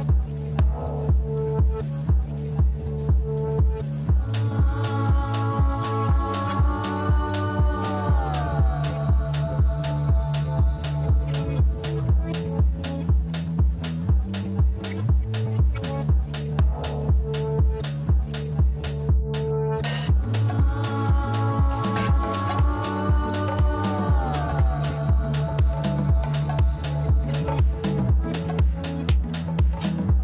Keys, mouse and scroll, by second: 0.8 scroll up 1, 2.0 ctrl+z, 2.5 ctrl+z, 3.7 ctrl+z, 4.2 ctrl+z, 5.9 shift+middle click, 6.7 shift+click, 8.2 ctrl+click, 8.9-9.3 scroll down 1, 9.3 middle click, 10.1 scroll up 2, 11.1 g, 13.6 Tab, 14.2-14.5 scroll down 1, 14.5-18.0 middle drag, 18.0 scroll up 1, 19.9 Tab, 21.8 ctrl+r, 26.3 Tab, 27.0-28.0 middle drag, 28.0 Tab, 29.4 ctrl+r.